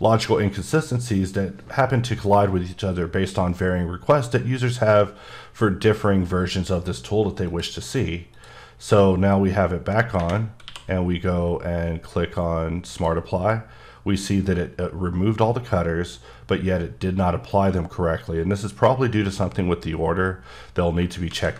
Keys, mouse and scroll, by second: 7.5 click, 8.3 click, 10.7 q, 12.9 click, 21.0 ctrl+click, 21.3 ctrl+z.